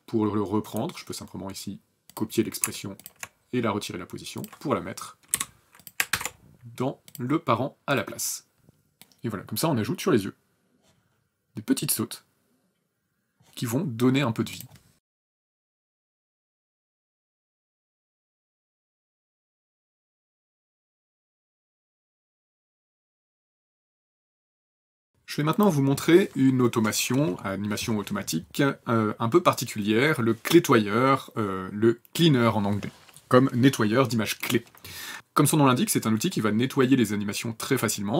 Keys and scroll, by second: 5.1 alt+p, 5.9 ctrl+alt+v, 14.9 alt+KP_8.